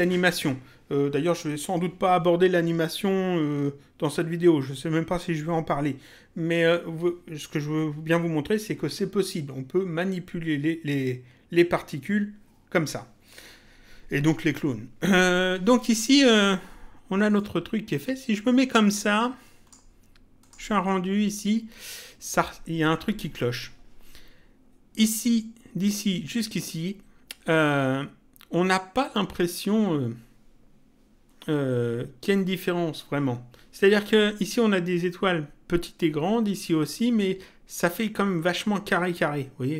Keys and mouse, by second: 17.3 click, 20.3 click.